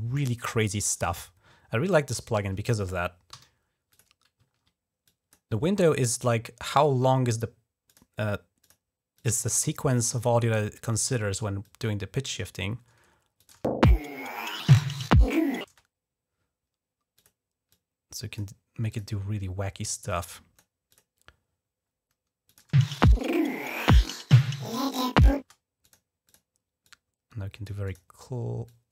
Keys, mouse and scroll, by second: 0.8 click, 1.4 scroll down 2, 1.7 ctrl+scroll up 3, 2.2 ctrl+scroll down 2, 2.5 ctrl+scroll up 2, 3.2 d, 3.7 click, 4.3 ctrl+scroll up 2, 4.9 click, 5.4 scroll down 1, 7.7 click, 8.5 click, 9.0 click, 10.1 click, 11.5 click, 13.2 click, 13.3 space, 15.4 space, 17.0 click, 17.5 click, 18.7 click, 19.9 click, 20.7 click, 22.3 click, 22.5 space, 25.2 space, 25.6 click, 26.1 click, 26.7 click, 27.7 click, 28.5-28.9 drag.